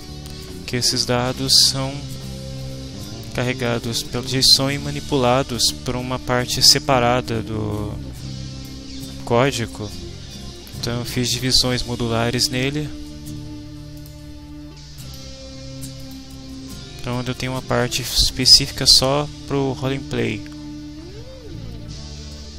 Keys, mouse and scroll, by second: 1.4-3.2 right drag, 7.8-8.8 drag, 14.0 click, 15.0 click, 16.0 click.